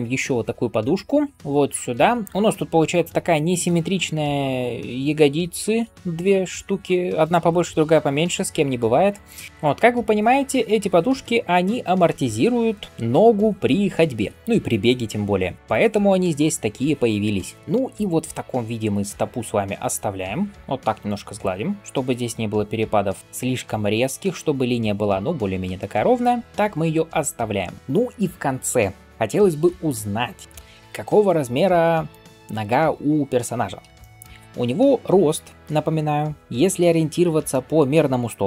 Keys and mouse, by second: 21.8-29.1 drag, 21.8-29.1 middle drag, 21.8-37.5 right drag, 36.5 KP_1.